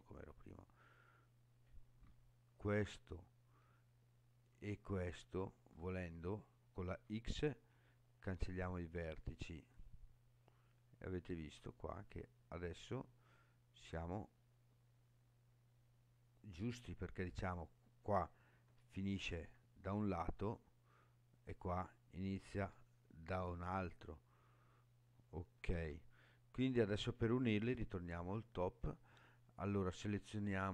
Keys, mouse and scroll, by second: 0.6 scroll up 2, 2.2 shift+middle click, 5.0 shift+click, 6.9 x, 11.6-15.2 middle drag, 15.7 middle click, 17.2 click, 18.7 g, 20.4 right click, 21.3 click, 22.6 g, 23.9 click, 25.7 ctrl+z, 27.6 KP_7, 30.1-30.7 drag.